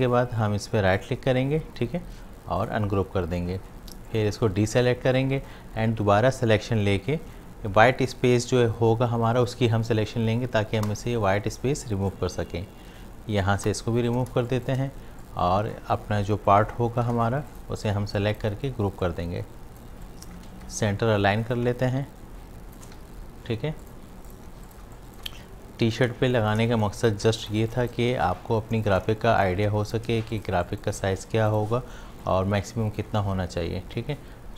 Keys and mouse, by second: 1.0 right click, 2.6 click, 6.3 click, 12.1-14.3 drag, 14.3 space, 14.5-16.8 drag, 17.1 ctrl+g, 17.5 click, 18.0 space, 18.2 click, 19.9 space, 20.1 click, 20.5 v, 21.5-23.0 alt+drag, 23.0 shift+v, 23.8 click, 24.5 space, 24.7 ctrl+click, 25.2 v, 26.3 shift+click, 26.6 shift+space, 28.0 v, 29.2 alt+shift+click, 30.2 shift+v, 30.5 space, 30.6 click, 32.0 space, 32.2 click, 32.5 space.